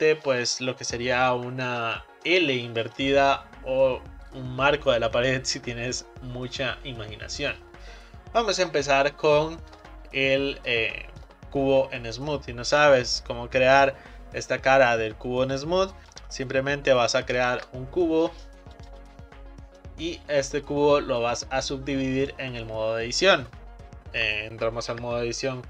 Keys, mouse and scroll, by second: 9.4-12.4 shift+middle drag, 16.0 click, 17.6 shift+a, 19.3-20.0 scroll down 4, 20.0-21.4 middle drag, 21.4 click, 25.0 Tab.